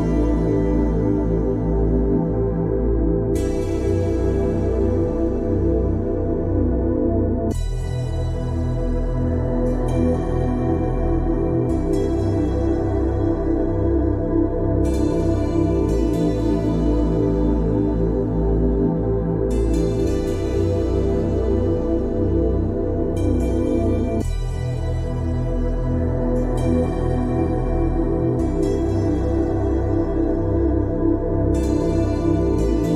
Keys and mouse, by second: 1.8 click.